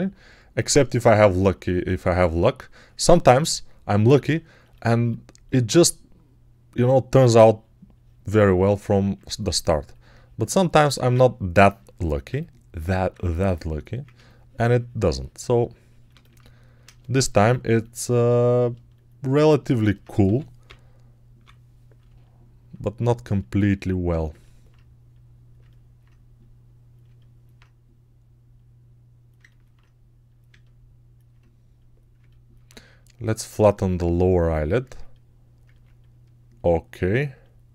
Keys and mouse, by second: 20.1 g, 20.5-21.3 ].